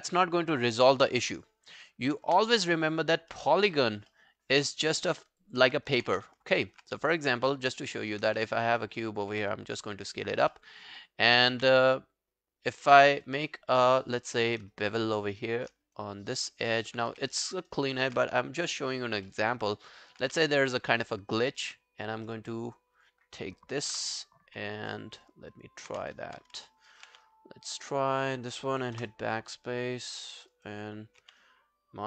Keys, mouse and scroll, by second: 2.3 space, 3.4 space, 3.8 scroll down 1, 4.1 alt+middle click, 4.4 alt+scroll down 1, 4.7 alt+click, 5.0 alt+middle click, 5.2 alt+right click, 5.4 alt+click, 6.1 w, 6.6 alt+middle click, 7.2 shift+right click, 8.4 w, 9.3 r, 10.3 alt+scroll up 1, 10.5 alt+middle click, 10.8 alt+right click, 11.0 alt+scroll down 1, 11.2 alt+right click, 11.6 q, 11.7 right click, 14.0 alt+middle click, 14.1 alt+right click, 14.3 alt+click, 14.7 shift+right click, 16.0 alt+click, 16.3 alt+right click, 16.6 alt+click, 17.1 w, 17.5 alt+middle click, 17.7 alt+right click, 19.3 alt+middle click, 19.6 alt+right click, 19.9 alt+click, 20.2 q, 20.4 right click, 22.3 right click, 23.9 ctrl+BackSpace, 24.9 alt+middle click, 25.2 alt+right click, 25.6-26.0 alt+scroll down 1, 26.1 alt+scroll down 1, 26.2 ctrl+z, 26.7 alt+middle click, 26.9 alt+right click, 27.3 right click, 29.0 BackSpace, 30.2 alt+middle click, 30.4 alt+scroll down 1, 30.5 alt+right click, 30.7 alt+click, 31.2 q, 31.4 right click.